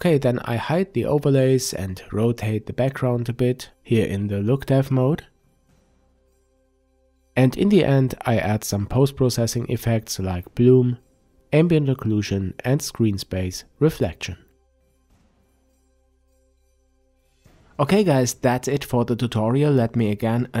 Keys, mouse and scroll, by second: 1.0-6.3 drag, 6.3-7.2 middle drag, 7.2 click, 8.6 click, 9.7 click, 12.2 click, 12.8 click, 14.2-20.6 middle drag.